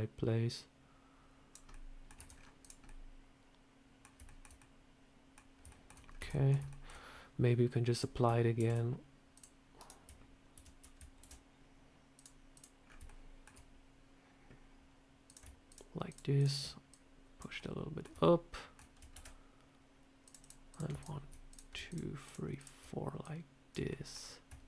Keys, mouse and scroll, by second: 1.6 middle click, 2.0 Tab, 2.2 scroll down 4, 2.5 click, 2.7 middle click, 4.1 shift+middle click, 4.4 middle click, 5.6 shift+middle click, 5.9 scroll up 2, 6.0 Tab, 6.2 middle click, 6.6 shift+middle click, 6.8 scroll down 2, 7.8 click, 8.4 ctrl+r, 10.4 ctrl+t, 11.1 ctrl+r, 12.7 scroll up 4, 12.9 shift+middle click, 13.3 shift+scroll down 1, 15.1 click, 15.5 shift+click, 16.8 shift+click, 17.4 middle click, 18.1 shift+middle click, 19.0 ctrl+r, 20.6 click, 20.9 shift+click, 21.4 click, 21.7 shift+click, 23.1 shift+click, 23.7 middle click, 24.4 shift+middle click.